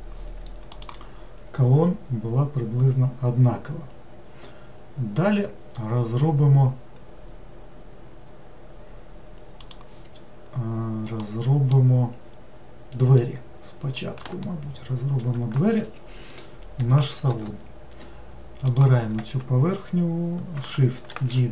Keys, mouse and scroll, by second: 11.3-12.4 middle drag, 12.4-13.2 scroll up 1, 13.2-17.6 middle drag, 18.7 click, 21.2 shift+d.